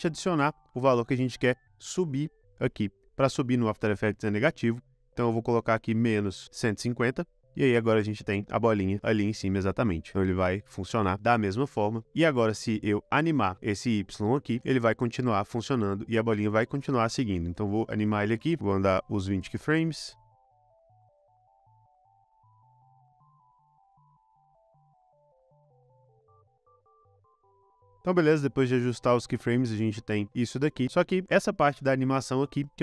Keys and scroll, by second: 5.9-6.9 typing, 9.6 space, 11.6 space, 18.6 shift+super+Right, 18.7 shift+super+Right, 20.5 shift+super+Right, 20.6 shift+super+Right, 21.8 shift+super+Right, 21.8 shift+super+Right, 23.6 space, 24.0 space, 27.9 space, 28.2 space, 31.1 space.